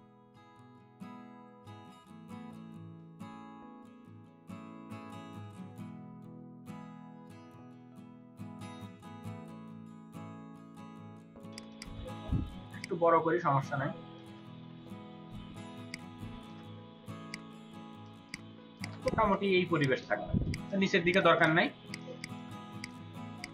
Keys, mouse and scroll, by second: 3.6 Delete, 3.9 ctrl+alt+double click, 4.2 ctrl+alt+double click, 4.5 space, 4.8 right click, 4.9 right click, 6.7 v, 6.8 ctrl+double click, 8.3 space, 10.3 ctrl+click, 11.4 ctrl+alt+click, 11.5 ctrl+alt+double click, 14.7 ctrl+z, 18.7 ctrl+alt+click, 21.3 ctrl+click, 22.4 space.